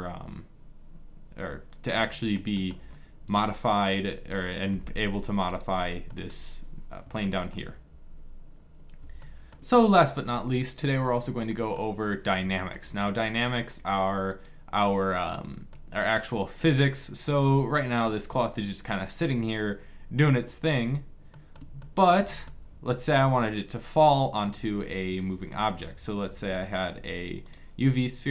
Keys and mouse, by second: 3.0 Delete, 4.6 middle click, 5.4 right click, 5.8-6.9 drag, 14.0-15.4 drag, 15.4-17.5 middle drag, 20.8-23.5 middle drag, 23.7 middle click, 24.5 shift+s, 26.0 shift+a.